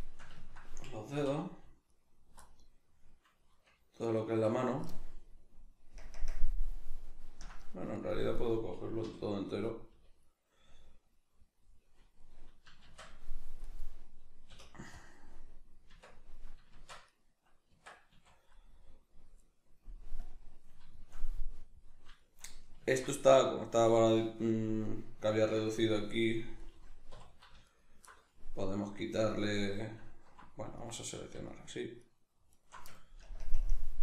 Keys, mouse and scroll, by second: 1.2 3, 1.9 alt+right click, 2.4-4.0 middle drag, 4.0 alt+right click, 4.5-8.4 middle drag, 6.0 ctrl+KP_Add, 8.4 right click, 9.0 l, 10.6-13.8 middle drag, 13.1 shift+d, 13.8 right click, 14.5 p, 15.9 Tab, 16.8 shift+Tab, 17.1 right click, 17.7 Tab, 18.1 a, 18.6-20.2 middle drag, 20.2 click, 21.0-27.7 shift+middle drag, 27.1 3, 27.7 alt+right click, 28.1-29.1 middle drag, 29.1 alt+right click, 30.7 alt+right click, 31.5 alt+shift+right click, 32.0 alt+shift+right click, 32.5 alt+shift+right click, 33.2 ctrl+KP_Add.